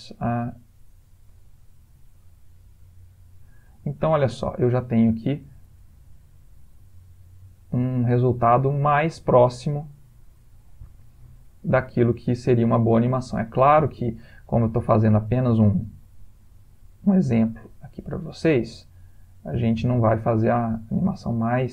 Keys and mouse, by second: 0.3 click, 1.3 space, 3.8 space, 4.7 click, 5.4 space, 9.2 space, 10.7 click, 11.9 click, 12.9 click, 14.4 s, 15.8 s, 17.5 click, 18.6 s.